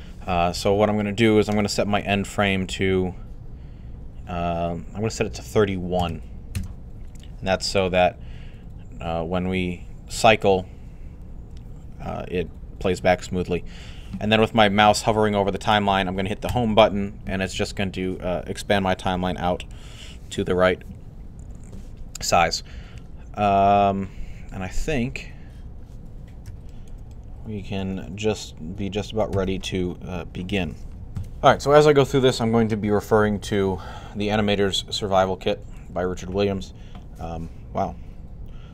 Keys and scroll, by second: 5.4-6.4 typing, 16.2 Home, 31.0 typing.